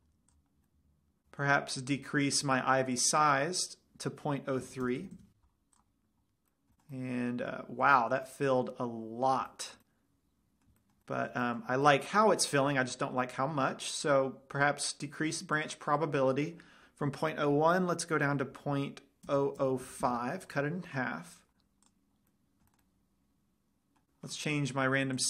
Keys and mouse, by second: 0.8-1.2 middle drag, 8.9-9.7 middle drag, 9.9-11.8 middle drag, 16.1-17.8 drag, 19.9 KP_0, 22.2 click, 22.5 middle drag.